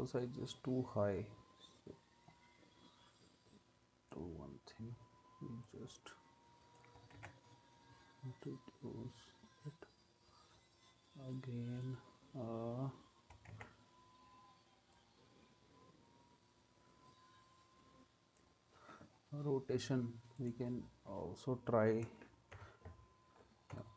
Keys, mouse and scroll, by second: 7.2 ctrl+z, 13.5 ctrl+z, 22.5 u, 23.7 u.